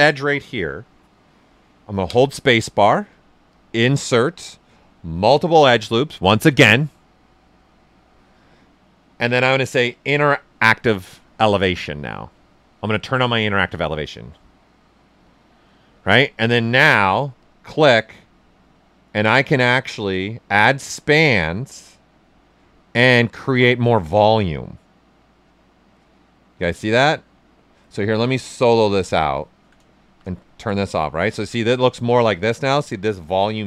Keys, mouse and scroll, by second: 2.0 space, 6.5 space, 8.9 space, 12.3 space, 15.8 space, 17.4-27.4 drag, 29.0 click, 29.4 alt+right click, 30.0 shift+f, 30.4 alt+right click, 31.7-33.6 shift+right drag.